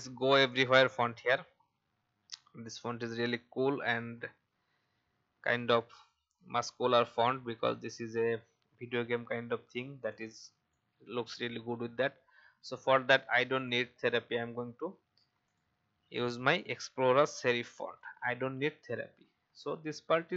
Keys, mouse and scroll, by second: 0.5 click, 1.6 alt+scroll up 1, 6.3-6.8 scroll down 1, 6.8 click, 8.8 alt+scroll down 1, 10.1 click, 15.4-19.0 drag, 20.2-20.3 alt+scroll up 1.